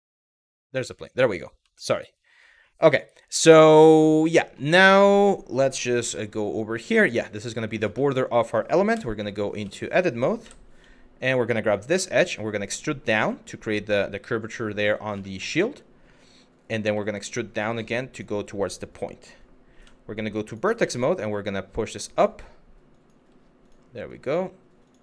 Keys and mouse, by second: 0.5 middle drag, 1.4 shift+middle drag, 4.1 shift+middle click, 5.6 g, 7.3 click, 7.6 shift+middle drag, 8.6 Tab, 9.1 2, 10.1 w, 11.6 e, 12.8 click, 14.9 shift+middle click, 16.5 e, 17.7 click, 19.4 1, 20.0 click, 20.4 g, 21.8 click, 22.6 click, 22.8 g, 23.3 click, 23.7 click, 24.5 click, 24.9 click.